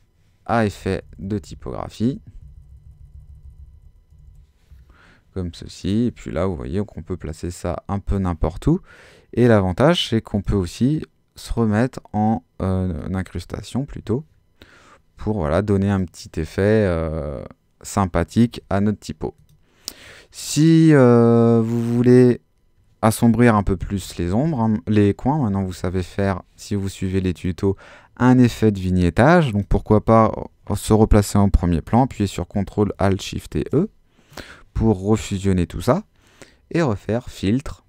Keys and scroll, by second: 0.6 Down, 2.1 Up, 2.4 Down, 4.1 Up, 23.6 Down, 25.5 Left, 25.8 Down, 33.5 alt+shift+super+e.